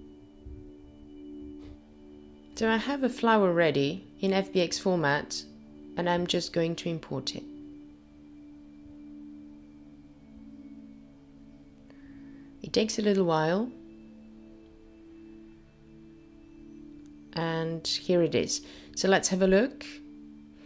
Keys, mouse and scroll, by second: 4.7 click, 19.8 middle click.